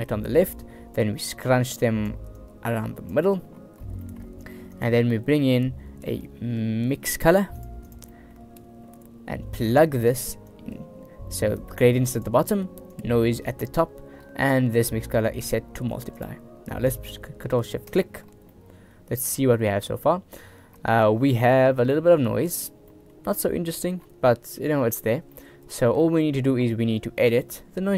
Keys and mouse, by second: 1.6 click, 2.4 click, 4.2 middle click, 4.7 shift+a, 8.2 click, 10.6-12.3 drag, 13.1-13.9 drag, 15.5-16.3 drag, 18.6-19.0 middle drag, 20.0-20.7 middle drag, 21.0 shift+middle click, 21.7 middle drag, 22.0 shift+middle drag, 23.0 middle click, 25.4 middle click, 26.3 middle click.